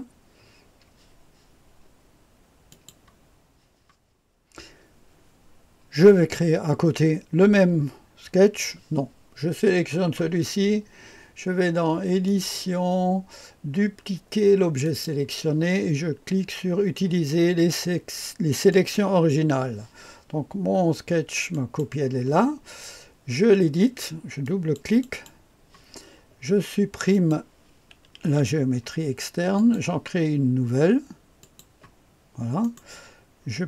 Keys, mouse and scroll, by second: 2.6 click, 12.2 click, 14.8 click, 18.6 click, 21.4 click, 24.4 click, 24.8 click, 25.0 click, 27.0 click, 28.2 Delete, 29.5 click, 31.3 click, 32.5 right click.